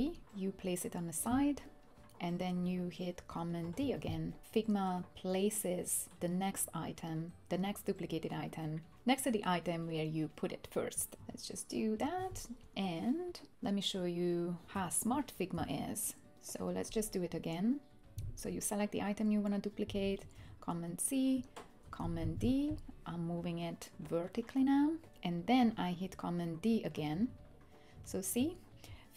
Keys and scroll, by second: 3.6 super+d, 11.1 super+d, 12.4 super+d, 14.7 BackSpace, 20.4 super+c, 21.9 super+d, 27.1 super+d, 28.0 super+d.